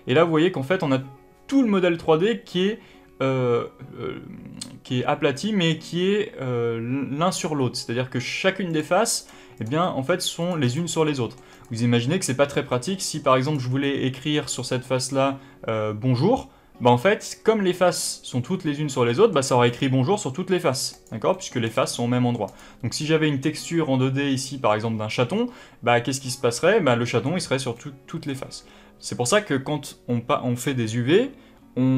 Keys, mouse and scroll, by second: 2.1-2.5 scroll up 1, 2.5-6.5 scroll down 1, 8.6 click, 9.1 click, 9.5 click, 9.7 middle click, 10.3 click, 10.5 click, 10.9 middle click, 11.4 click, 12.6 middle click, 13.3 click, 13.7-20.8 middle drag, 20.8 click, 21.2 middle click, 21.6 click, 21.8 middle click, 22.4 click, 26.9-31.9 middle drag.